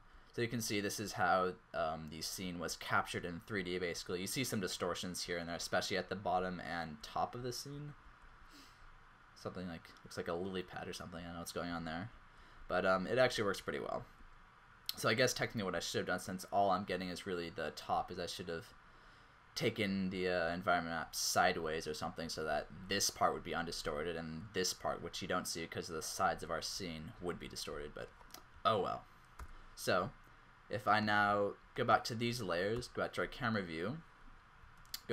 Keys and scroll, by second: 0.0-3.6 typing, 5.2 q, 6.4 q, 7.4-8.1 typing, 11.2-14.0 typing, 15.9 q, 18.2 q, 20.5 q, 21.6-24.2 typing, 26.0 q, 27.2-27.8 typing, 29.5 z, 32.7 0, 34.8 alt+z.